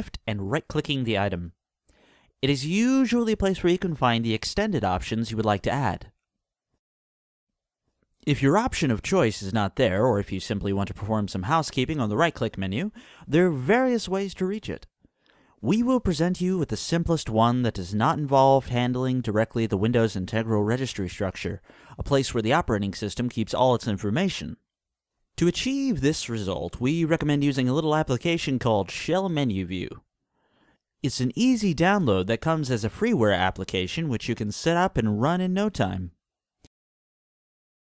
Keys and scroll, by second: 28.4 s, 28.6 h, 28.8 e, 29.1 l, 30.2-31.7 typing, 33.2 Return.